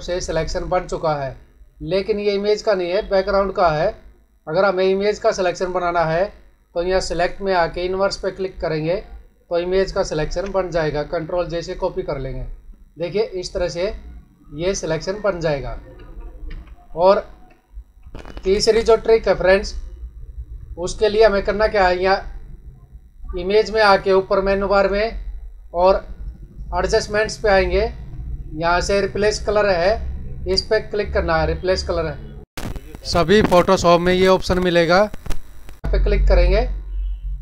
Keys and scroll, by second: 10.1 ctrl+j, 15.9 ctrl+alt+z, 17.9 ctrl+d, 20.7 ctrl+=.